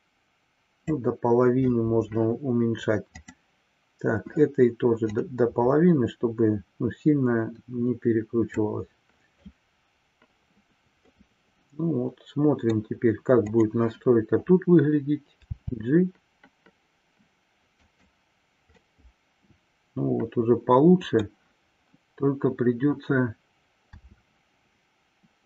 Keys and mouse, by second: 5.5-8.6 drag, 11.0-12.6 middle drag, 13.4 click, 18.9-21.1 middle drag.